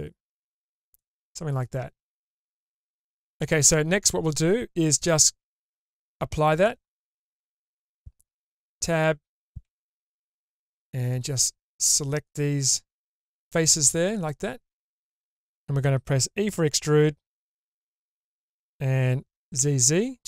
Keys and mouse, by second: 2.4 3, 2.6 ctrl+z, 5.0 Tab, 6.6-7.5 drag, 8.4 Tab, 9.6 w, 11.2-12.7 drag, 13.4-14.2 middle drag, 14.8 middle click, 17.7 e.